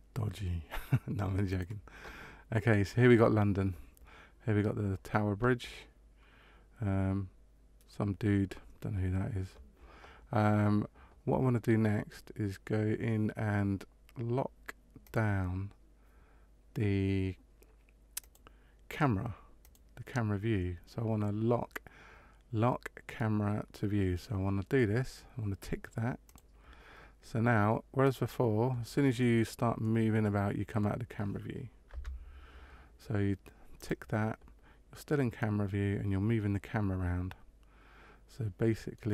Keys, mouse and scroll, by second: 14.9 click, 18.1 click, 19.5 click, 26.2 click, 27.9 click, 29.7 middle click, 31.8 KP_0, 33.7 click, 35.0 middle click.